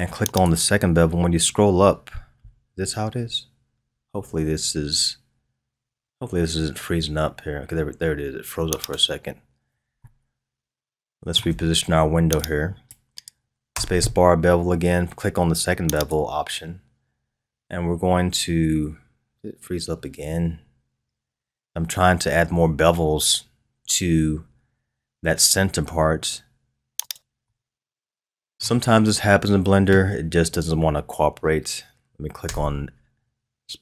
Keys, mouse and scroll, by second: 9.3-10.0 scroll up 2, 10.0-12.4 shift+middle drag, 12.4-13.7 drag, 13.7 space, 27.4-29.3 middle drag, 29.3-32.2 scroll down 1, 32.2 scroll down 1, 32.4 space.